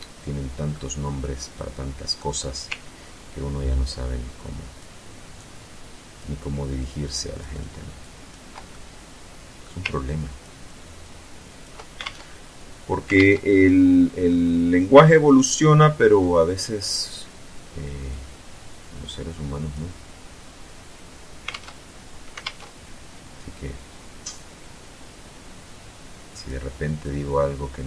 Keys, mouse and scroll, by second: 0.1 click, 0.5-1.7 middle drag, 2.3-4.2 ctrl+drag, 4.7-5.7 ctrl+drag, 6.0-7.1 ctrl+drag, 7.3 ctrl+click, 8.0-9.1 ctrl+middle drag, 9.4-10.5 ctrl+drag, 10.8 ctrl+click, 11.3 ctrl+alt+Tab, 12.4 alt+Tab, 13.6-14.6 middle drag, 14.6 scroll up 2, 17.4-19.2 drag, 20.8 alt+Tab, 21.7 alt+Tab, 23.8-25.9 drag, 26.3-27.6 drag.